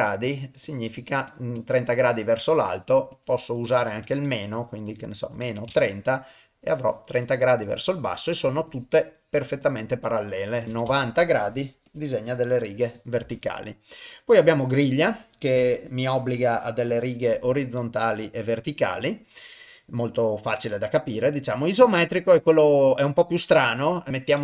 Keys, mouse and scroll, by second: 0.3 click, 0.7 click, 1.0 click, 1.3 click, 1.6 click, 2.4-5.8 drag, 6.3 click, 6.8 click, 7.3 click, 7.6 click, 8.7 click, 9.2 click, 9.6 click, 10.6 click, 11.5 click, 11.9 click, 12.3 click, 13.3-14.9 drag, 15.4 click, 15.8 click, 16.2 click, 16.5 click, 16.9 click, 17.8 click, 19.1-24.4 drag.